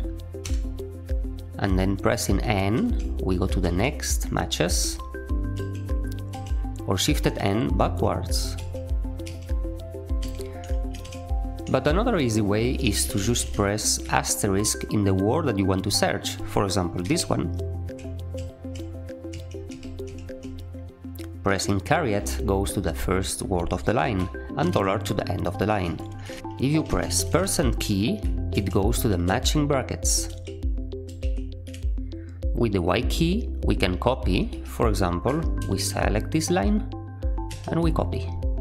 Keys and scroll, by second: 0.3 Return, 2.7-6.4 typing, 7.7-11.0 typing, 12.4-13.4 typing, 18.3-22.1 typing, 24.5 shift+4, 25.6-27.3 typing, 28.5 %, 29.2 %, 30.2 %, 31.0 %, 34.4 j, 35.5 shift+v, 37.4 y.